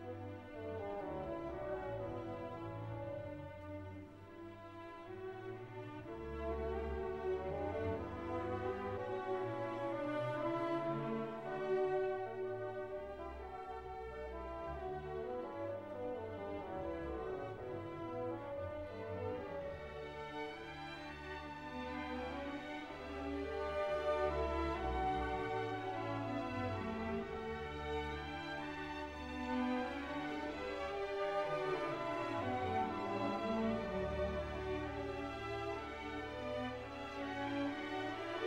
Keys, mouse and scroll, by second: 1.4 scroll down 1, 4.2-7.1 drag, 7.1-10.3 drag, 12.7 scroll down 1, 14.7-25.2 drag, 25.2-28.9 drag, 28.9 click, 29.8 scroll down 1, 30.4 click, 31.4 click, 32.0 click, 32.7-36.1 drag, 36.1-38.4 drag.